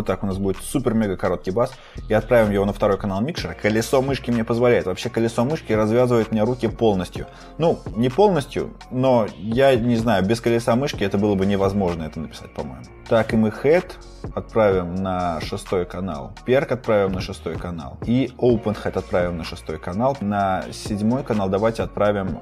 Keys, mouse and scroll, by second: 1.8-3.3 scroll, 3.3-3.8 scroll, 4.1-4.5 scroll, 4.9-5.2 scroll, 6.9-7.3 scroll, 7.6-7.9 scroll, 8.2 scroll, 8.9-10.0 scroll, 12.7 scroll, 13.4-15.2 scroll, 15.2-15.5 scroll, 16.4-16.9 scroll, 16.9-19.1 scroll, 19.6-20.1 scroll, 20.1-20.5 scroll, 21.2 scroll, 21.4 typing.